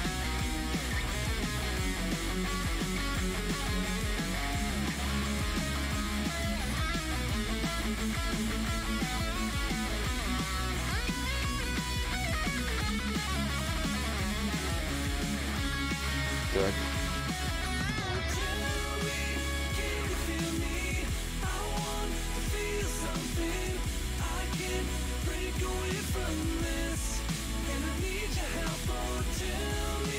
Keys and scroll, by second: 10.2 ctrl+z, 10.4 ctrl+z, 10.6 ctrl+z, 10.9 ctrl+z, 11.2 ctrl+z, 11.5 ctrl+z, 11.9 ctrl+z, 13.3 ctrl+z, 13.7 ctrl+z, 14.1 ctrl+z, 14.7 ctrl+z, 15.3 ctrl+z, 15.8 ctrl+z.